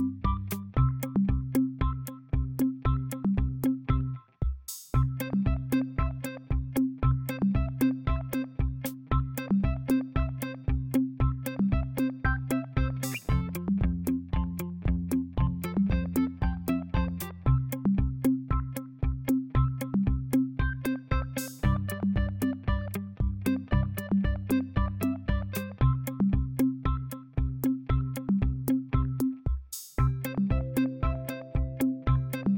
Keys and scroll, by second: 30.9-32.2 typing.